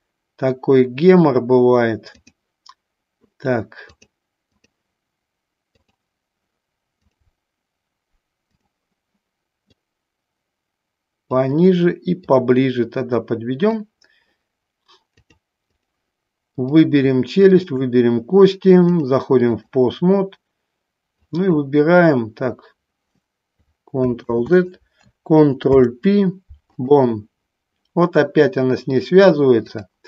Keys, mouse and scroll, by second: 0.0-2.5 drag, 4.2 click, 6.0 click, 7.3-8.9 drag, 9.8-11.4 drag, 12.5-13.9 drag, 15.3 click, 17.6 shift+click, 19.0 click, 21.4 click, 24.4 ctrl+z, 29.9-30.0 drag.